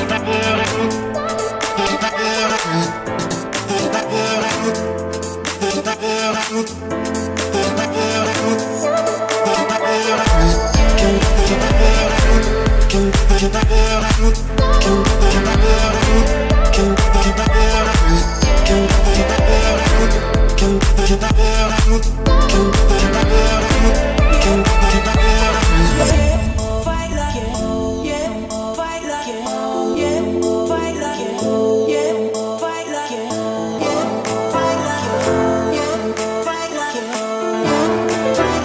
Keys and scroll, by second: 8.4 Return, 13.8 Return, 20.9 Return, 30.8 Escape, 38.0 Escape.